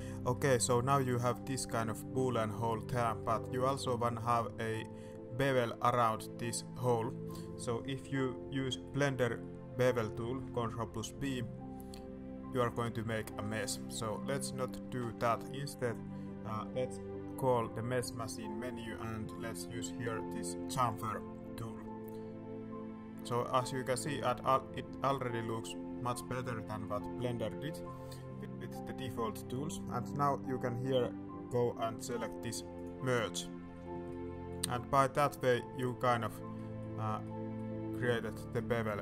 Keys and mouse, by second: 0.3 middle click, 1.0 middle click, 2.1 shift+middle click, 3.2 middle click, 7.0 middle click, 8.6 middle click, 9.2 middle click, 11.1 ctrl+b, 13.5 click, 14.1 click, 14.8 ctrl+z, 17.5 y, 32.7 click, 34.1 click, 35.0 middle click, 35.6 middle click, 36.6 middle click, 37.3 middle click, 38.0 middle click, 38.6 middle click.